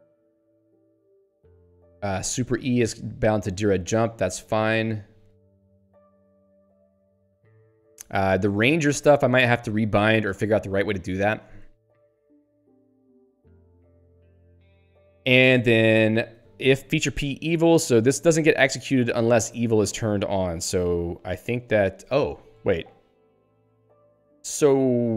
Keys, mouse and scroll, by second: 2.1 ctrl+p, 3.4 ctrl+n, 4.7 ctrl+p, 5.2 ctrl+n, 15.8 ctrl+p.